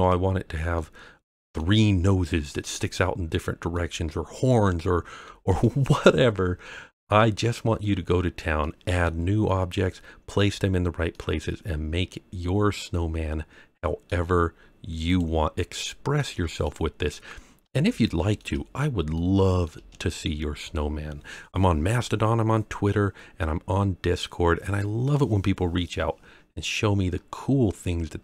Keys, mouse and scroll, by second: 0.7-1.5 middle drag, 3.3-3.7 scroll down 1, 3.7-5.6 middle drag, 6.2 scroll up 1, 6.7-7.1 scroll up 1, 7.1-7.8 middle drag, 8.0-8.4 scroll down 2, 8.6-9.0 middle drag, 10.4-10.7 scroll down 2, 11.1-14.0 middle drag, 15.0 click, 16.1 middle click, 17.3 scroll down 1, 17.8-18.3 shift+middle drag, 18.7-19.2 scroll up 2, 19.1-19.6 middle drag, 20.1 scroll down 2, 24.4 scroll up 1, 25.0-28.2 middle drag.